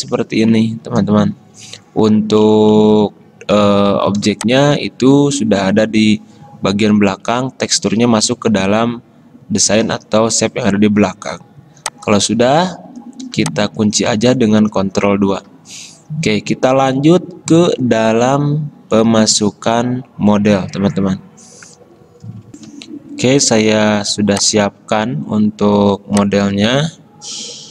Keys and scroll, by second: 14.7 ctrl+2, 22.8 alt+Tab, 22.8 F10, 26.8 alt+Tab.